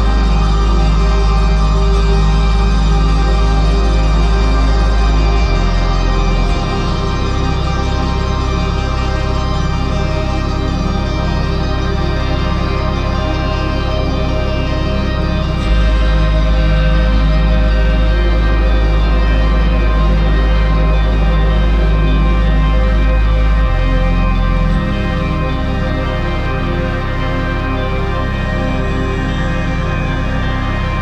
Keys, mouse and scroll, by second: 15.0 right click, 28.4 ctrl+z, 30.1 ctrl+z.